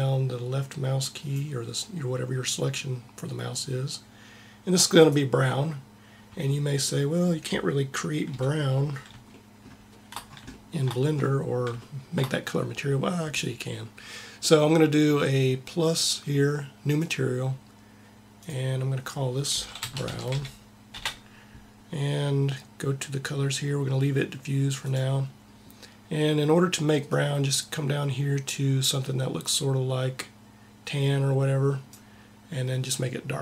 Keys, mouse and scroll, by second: 8.1 KP_1, 15.6-19.7 drag.